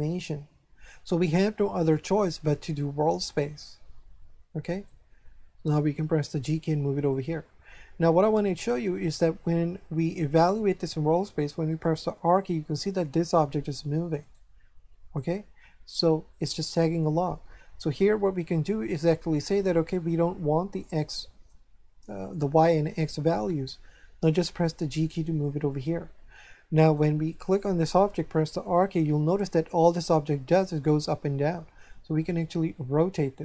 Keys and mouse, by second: 1.7 click, 4.6 click, 6.1 g, 7.1 click, 9.0 right click, 11.9 r, 14.2 right click, 20.7 click, 22.2 click, 24.4 g, 25.7 click, 26.8 right click, 28.7 r.